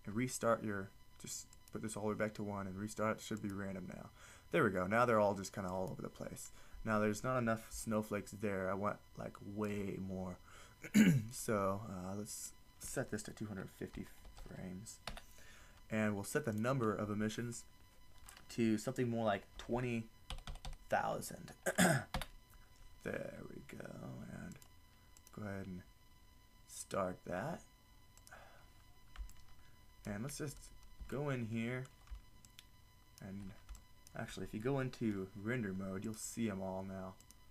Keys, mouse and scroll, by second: 1.5-5.3 drag, 6.0-7.4 drag, 7.9-9.0 middle drag, 12.4-15.1 drag, 16.5-20.5 drag, 20.5 0, 24.6 drag, 28.3-30.0 drag, 36.1-37.5 drag.